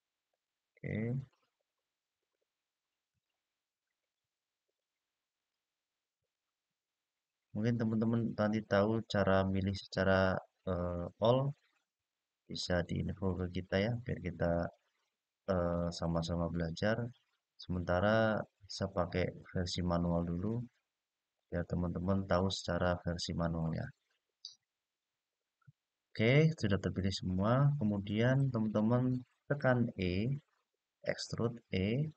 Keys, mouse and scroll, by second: 0.0 shift+click, 0.8 shift+click, 1.9 shift+click, 2.8 shift+click, 3.7 shift+click, 4.4 shift+click, 5.1 shift+click, 5.9 shift+click, 7.2 shift+click, 8.1 shift+click, 9.4 shift+click, 10.5 shift+click, 11.7 shift+click, 12.6 shift+click, 13.5 shift+click, 14.3 shift+click, 15.8 shift+click, 16.8 shift+click, 18.1 shift+click, 19.1 shift+click, 20.1 shift+click, 21.1 shift+click, 22.1 shift+click, 25.4-28.1 middle drag, 31.5-32.1 e.